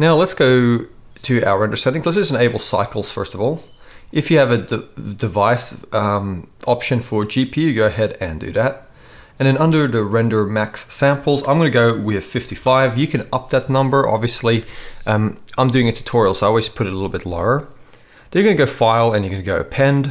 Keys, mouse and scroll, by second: 1.6-2.1 right drag, 12.4 5, 19.5 middle click, 19.7-20.1 middle drag.